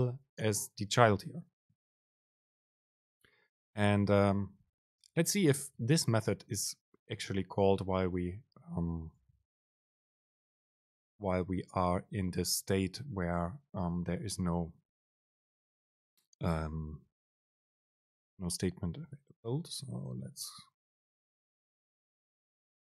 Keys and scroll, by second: 4.6 alt+super+[, 5.1 Up, 5.4 End, 6.2 Return, 9.7 Return, 10.0 super+space.